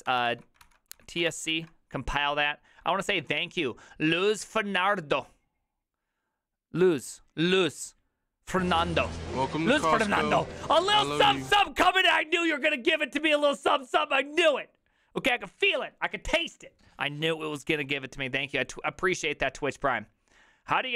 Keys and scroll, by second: 0.0-1.7 typing.